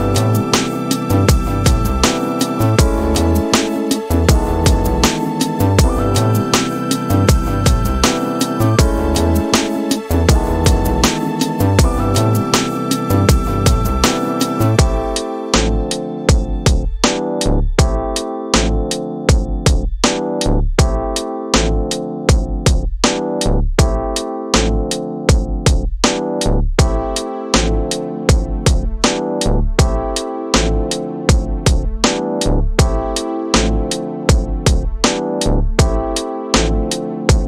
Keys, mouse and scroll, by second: 3.1-11.5 drag, 14.3-23.2 drag, 23.8-27.0 right drag, 30.3-31.5 drag, 33.1-35.1 drag, 36.4-37.4 drag.